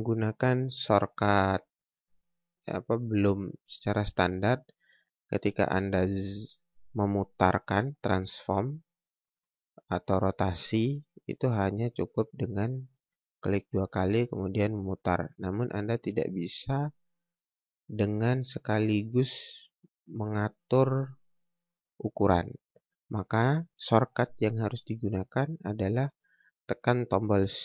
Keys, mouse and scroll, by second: 0.1 scroll down 1, 0.2 scroll up 1, 0.8 click, 3.6 click, 11.3 click.